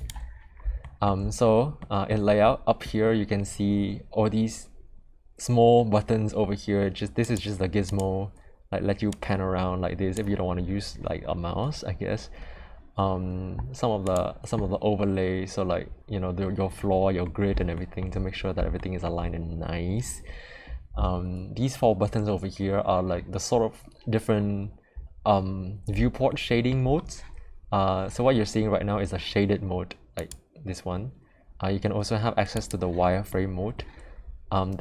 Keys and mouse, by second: 0.8 shift+middle drag, 1.7 middle click, 7.2 click, 7.8 click, 9.1-10.1 drag, 14.1-16.4 drag, 17.7 shift+middle drag, 18.7 shift+middle drag, 26.2-26.7 shift+middle drag, 30.1 click, 32.5 click, 33.3-33.7 middle drag.